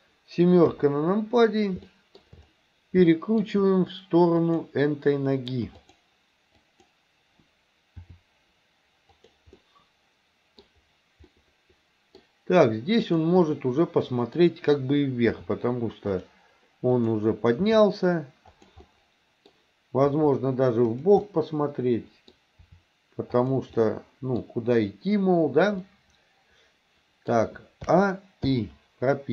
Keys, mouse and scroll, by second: 0.7 KP_7, 1.9 middle click, 3.2 middle click, 4.4 click, 5.8 click, 8.1 r, 9.6-10.7 middle drag, 11.3-12.2 middle drag, 13.1 click, 13.5-14.4 middle drag, 15.4 r, 17.0 click, 17.7 r, 18.9 middle click, 20.2 r, 21.3-22.4 middle drag, 22.4 scroll down 1, 22.7 r, 23.8-24.5 middle drag, 24.5-25.6 scroll down 1, 25.9-27.9 middle drag, 27.9 a, 28.5 i.